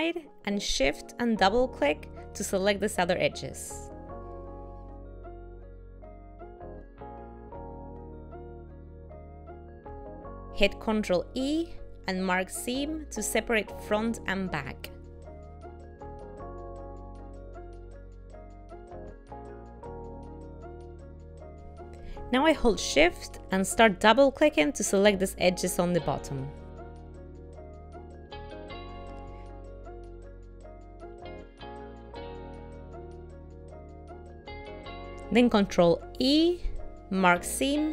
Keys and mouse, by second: 1.0 shift+middle click, 3.0 shift+click, 3.3 shift+click, 4.7 middle click, 7.3 ctrl+middle click, 10.0 ctrl+e, 15.3 shift+middle click, 16.8 shift+middle click, 17.1 middle click, 19.8 shift+middle click, 21.5 ctrl+middle click, 22.5 shift+click, 22.7 shift+click, 25.1 shift+click, 25.4 shift+click, 27.0 shift+click, 27.4 shift+click, 27.7-29.5 shift+click, 29.3 shift+click, 29.4 shift+click, 32.7 shift+middle click, 35.5 ctrl+e.